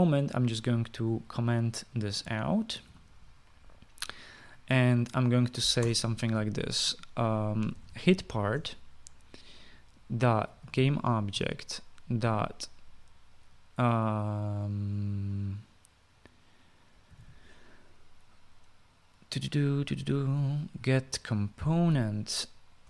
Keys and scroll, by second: 2.7-3.6 typing, 6.6 Return, 8.3-9.3 typing, 10.8-13.0 typing, 12.1 Return, 17.6-18.3 typing, 21.3-22.7 typing.